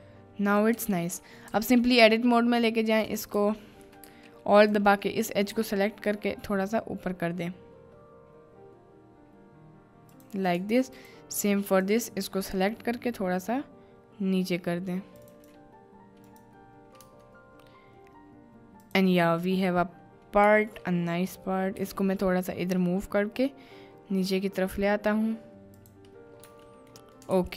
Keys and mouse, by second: 0.8 Tab, 3.1 click, 3.7 shift+click, 4.6 alt+click, 5.6 g, 10.1 click, 11.6 alt+click, 12.5 g, 15.2 click, 17.0 Tab, 18.8 drag, 20.4 Tab, 21.8 g, 25.8 click, 26.4 Tab, 27.1 middle click, 27.4 ctrl+s.